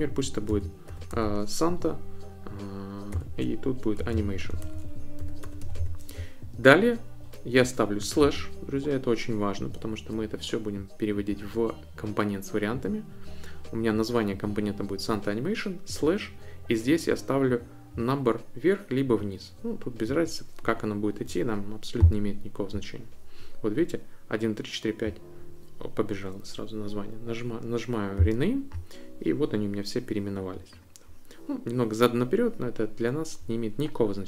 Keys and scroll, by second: 0.0-1.6 typing, 3.2-6.4 typing, 8.2 i.